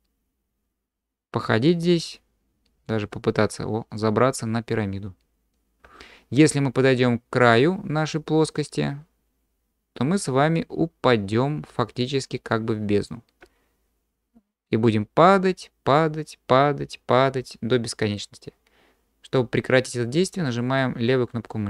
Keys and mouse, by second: 1.8-3.3 middle drag, 3.3-19.4 drag, 19.4-21.6 middle drag.